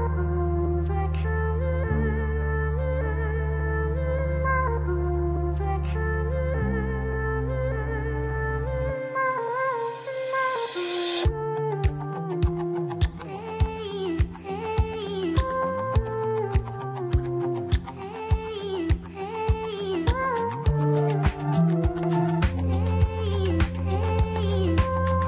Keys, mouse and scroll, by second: 0.4-1.5 scroll down 2, 1.7-2.1 scroll down 2, 2.1-2.9 middle drag, 2.9-3.5 scroll up 5, 3.5 Tab, 5.4 click, 5.8 click, 6.9 alt+shift+click, 8.1 alt+shift+click, 8.8 scroll down 2, 9.3-11.2 middle drag, 11.2 alt+shift+click, 12.0-13.2 middle drag, 13.2-13.8 scroll up 1, 13.8 shift+middle click, 14.3-15.0 scroll up 2, 15.0 shift+middle click, 15.7-16.1 scroll up 2, 16.8-18.4 scroll down 2, 18.4 alt+shift+click, 19.6-20.3 scroll down 8, 20.3-21.3 middle drag, 21.3-22.8 scroll up 2, 22.8 e.